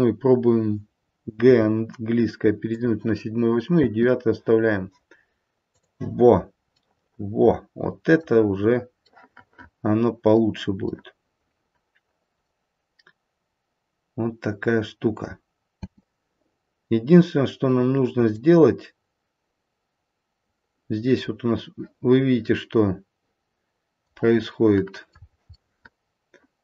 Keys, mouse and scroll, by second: 1.4 g, 3.7 space, 5.8 click, 6.3-7.4 scroll up 2, 6.8 middle click, 8.2 middle click, 8.4-9.1 scroll down 1, 9.1 middle click, 9.1-9.9 scroll down 1, 9.9 middle click, 11.1 middle click, 11.4 middle click, 12.2 middle click, 15.8 space, 18.3 click, 24.7 middle click, 25.5 middle click.